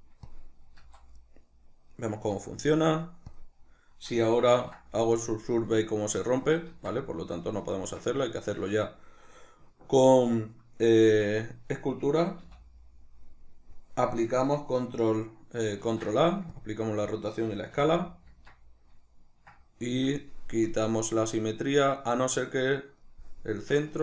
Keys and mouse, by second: 0.7 z, 1.2-4.6 middle drag, 2.3 z, 4.6 ctrl+2, 5.6 middle click, 6.8 ctrl+z, 7.0 middle click, 7.8 Tab, 8.5 shift+middle click, 11.1 Tab, 12.4 n, 15.8 ctrl+a, 17.8 n, 18.3 Tab, 19.9 shift+middle click, 20.7 click, 23.6-24.0 middle drag, 23.9 Tab.